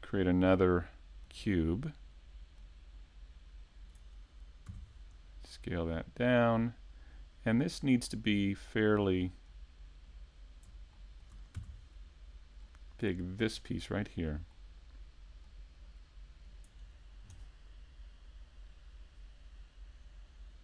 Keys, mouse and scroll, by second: 2.6 click, 8.3 click, 8.9 click, 10.9 shift+middle click, 12.8 click, 13.4 click, 13.9 middle click, 15.4 click.